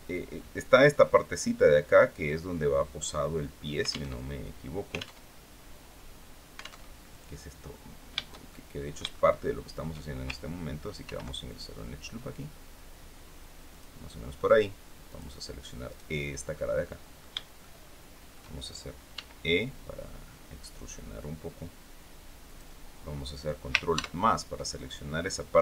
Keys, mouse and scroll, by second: 3.8 alt+Tab, 4.8 alt+Tab, 6.5 alt+Tab, 8.2-9.6 shift+middle drag, 10.7 ctrl+r, 11.2 ctrl+click, 13.4 click, 14.7 click, 15.5 right click, 15.9 scroll down 1, 16.2 middle click, 17.3 shift+middle click, 18.8 e, 22.1 click, 23.6 ctrl+KP_Add, 25.2 middle click.